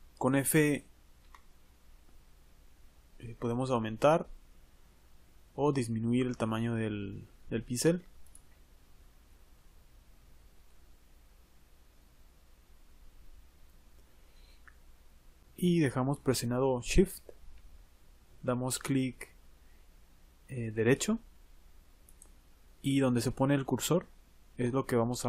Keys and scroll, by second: 0.7 f.